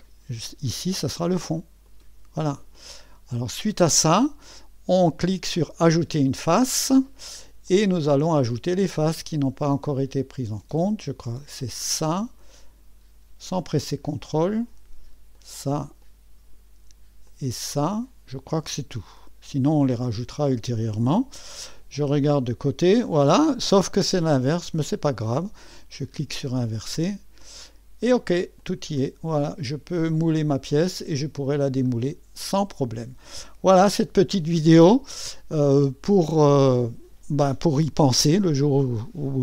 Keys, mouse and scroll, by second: 0.0-4.4 drag, 5.8-7.5 drag, 7.7-12.6 drag, 13.4-15.6 drag, 16.1 click, 17.3 click, 17.9 click, 19.8 click, 22.3 3, 24.5 click, 26.0-28.4 drag, 28.6-33.4 drag, 33.9 3, 34.9-35.7 scroll up 3, 35.7-37.7 middle drag, 37.7 typing.